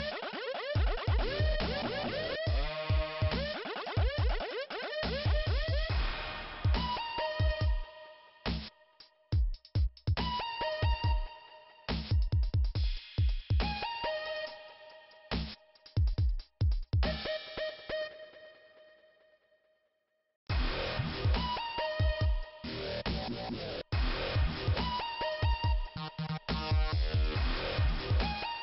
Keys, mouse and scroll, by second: 1.4 click, 4.3 click, 5.7 click, 5.8 click, 6.6 scroll down 1, 8.4 click, 10.8 click, 13.2 click, 14.2 click, 14.8 click, 14.8 click, 15.6 scroll up 2, 16.8 click, 17.8 Delete, 18.9 click, 19.3 scroll down 2, 20.4-21.3 scroll up 3, 21.3 click, 21.4 scroll up 1, 21.6 click, 23.1 click, 26.4 click, 26.5 click, 27.5 click, 27.6 click, 28.3 click.